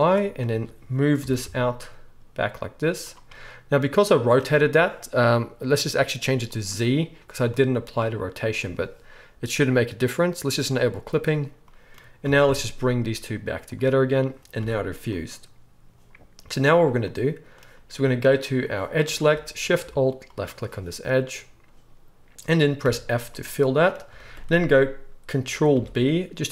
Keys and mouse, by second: 0.5 a, 1.2 g, 6.5 middle click, 6.5 right click, 10.9 middle click, 10.9 right click, 12.2 g, 14.5 g, 15.3-16.5 middle drag, 16.5 click, 16.6-18.5 middle drag, 18.5-20.4 drag, 19.1 alt+a, 20.4-26.5 alt+shift+middle drag, 22.8 f, 25.7 ctrl+b.